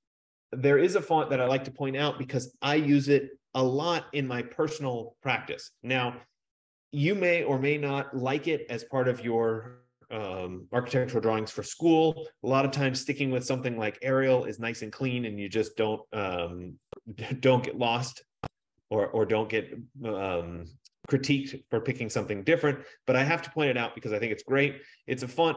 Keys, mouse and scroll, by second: 1.6 click, 19.5 click, 24.1-24.6 scroll.